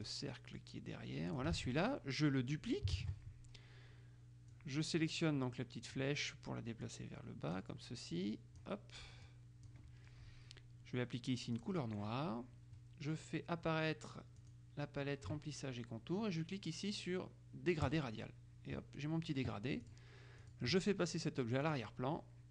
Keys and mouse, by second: 1.6 ctrl+click, 1.7 ctrl+z, 3.1 ctrl+d, 4.7-6.6 drag, 7.0-8.2 drag, 8.3 click, 9.4 click, 11.7 click, 14.5 click, 18.1 click, 20.0-21.1 drag, 21.8 click.